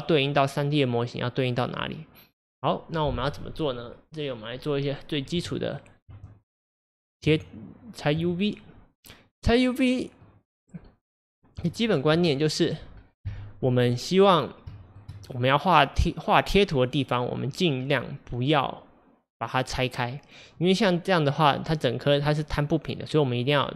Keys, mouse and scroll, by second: 1.9 click, 5.4 Tab, 8.2 Tab, 9.4-10.6 middle drag, 10.6 scroll up 3, 11.3 scroll down 2, 11.7-12.9 shift+middle drag, 12.9 scroll up 1, 13.2 KP_1, 14.3-14.7 scroll down 3, 14.8-23.6 shift+middle drag.